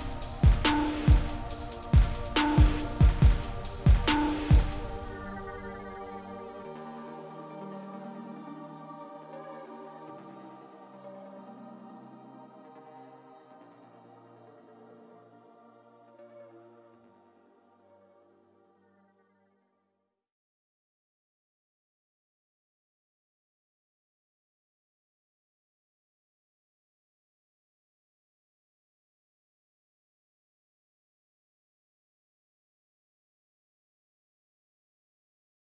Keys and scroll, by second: 0.0-1.3 typing, 2.8-3.7 typing, 5.2 BackSpace, 5.4 1.